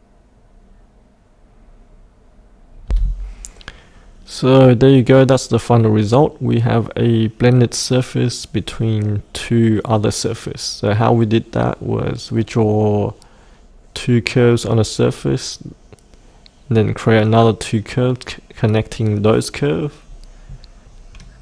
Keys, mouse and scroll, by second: 19.9-20.8 scroll up 1, 20.8-21.4 scroll down 1.